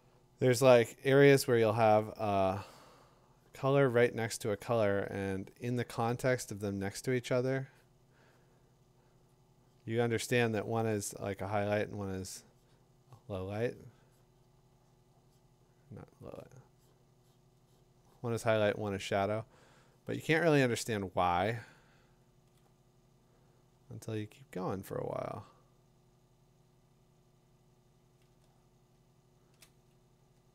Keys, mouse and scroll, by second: 2.4-3.1 typing, 6.1 ], 6.3 ], 9.3 click, 12.3 click, 14.2-19.2 drag, 22.4-28.3 drag, 30.2 click.